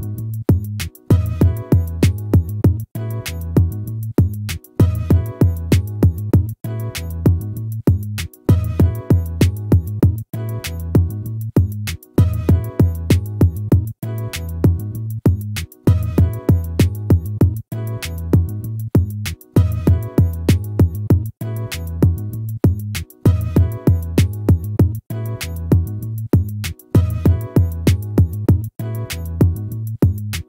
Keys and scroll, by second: 2.3 ctrl++, 9.8 ctrl++.